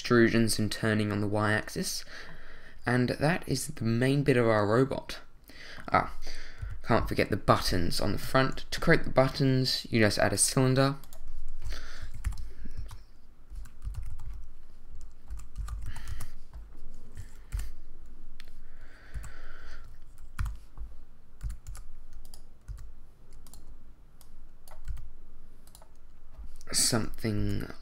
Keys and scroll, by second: 6.6 l, 8.1 shift+a, 12.2 6, 12.8 Return, 13.6 r, 13.8 x, 14.0 9, 14.1 0, 15.3 r, 15.6 x, 15.7 9, 15.9 0, 16.1 Return, 17.5 7, 19.1 2, 20.4 7, 21.7 y, 22.7 s, 24.9 s, 27.4 g.